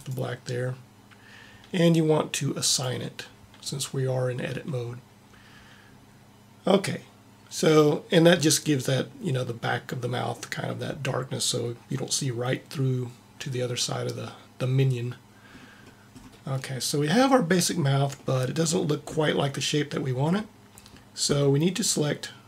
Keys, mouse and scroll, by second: 2.6 click, 4.3 click.